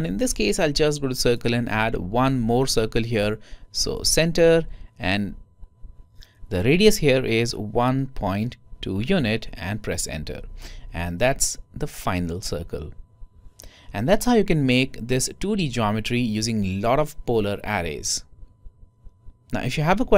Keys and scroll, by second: 7.5-8.2 typing, 10.8-12.7 typing.